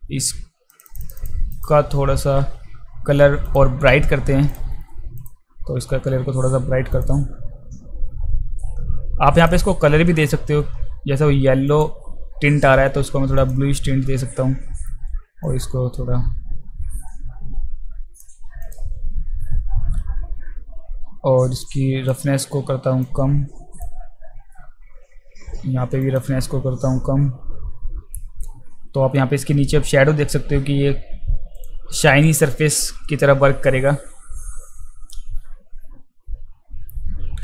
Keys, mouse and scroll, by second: 0.7 click, 0.9 click, 1.0 click, 1.2 click, 1.5 click, 3.5 click, 5.2 click, 6.9 click, 11.7 click, 13.4 click, 15.5-18.2 drag, 18.6 click, 21.6-22.1 drag, 23.0-23.8 drag, 26.0 click, 31.5 click.